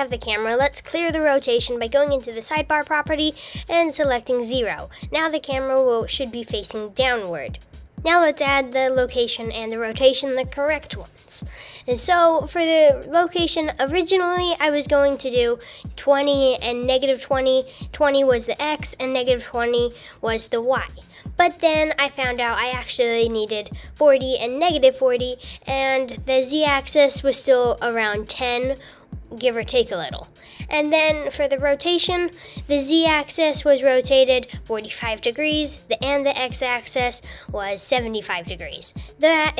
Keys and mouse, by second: 0.8 n, 2.1-4.4 drag, 12.0-13.3 drag, 14.2 super+z, 14.7 click, 15.5-16.5 drag, 16.6 click, 17.3 click, 18.1 click, 18.8 click, 19.7 click, 21.8 click, 22.3 super+z, 22.3 click, 22.4 super+z, 22.7 click, 23.0 BackSpace, 23.9 super+z, 24.0 click, 24.3 click, 24.4 super+z, 24.6 click, 25.1 click, 25.4 BackSpace, 27.1 super+z, 27.3 super+z, 27.6 KP_0, 28.1 click, 28.5 super+z, 28.7 click, 29.1 super+z, 29.3 click, 29.7 super+z, 29.9 click, 30.2 super+z, 30.5 click, 30.9-32.3 drag, 32.5 super+z, 33.5 r, 34.9 r, 37.5 KP_0, 37.7 shift+space, 38.4 super+z, 39.1 click, 39.4 super+z.